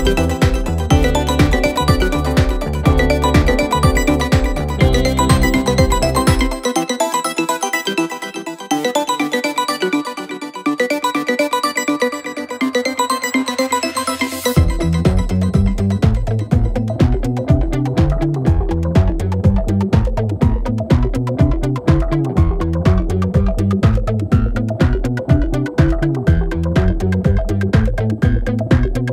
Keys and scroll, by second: 3.0 ], 6.0 4, 9.1 3, 9.8 ], 12.8 4, 14.6 3, 17.6 5, 18.1 4, 19.2 5, 23.2 4, 24.0 4, 26.3-28.7 typing.